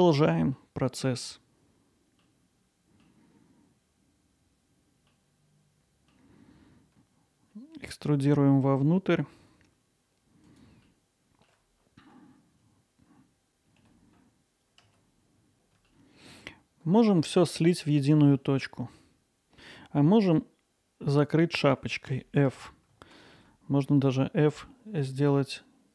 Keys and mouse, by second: 2.9 middle click, 3.3 Tab, 3.6 click, 3.8 alt+middle click, 4.0 middle click, 4.4 g, 4.8 z, 5.7 click, 5.8 alt+middle click, 6.4 e, 6.7 s, 10.0 click, 10.1 alt+middle click, 11.2 g, 11.5 z, 12.1 click, 12.3 middle click, 12.7 s, 13.1 click, 14.0 alt+middle click, 14.6-15.0 ctrl+alt+middle drag, 15.0 middle drag, 15.4 alt+middle click, 15.9-17.0 alt+middle drag, 18.4 middle click, 22.1 f, 23.3 ctrl+z, 25.0 alt+middle click.